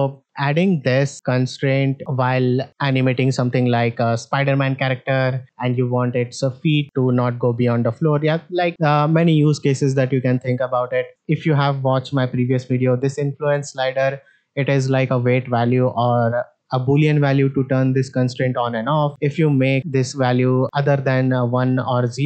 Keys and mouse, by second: 2.0 middle click, 11.1-14.1 drag, 14.6 click, 15.7 click, 17.1-22.2 drag.